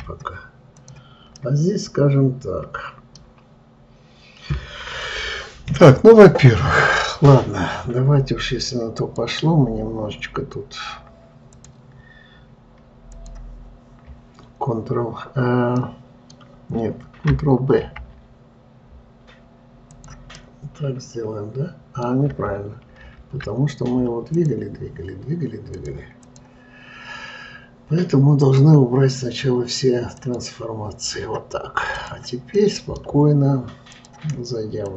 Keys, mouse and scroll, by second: 0.3 Delete, 1.2 click, 1.8-4.8 middle drag, 9.4-12.4 drag, 13.5 click, 16.3-18.2 middle drag, 18.2 ctrl+b, 20.8-23.4 middle drag, 23.4 ctrl+z, 24.8 click, 26.2-29.0 drag, 30.7-32.5 drag, 33.1-34.4 middle drag, 34.4-34.9 drag.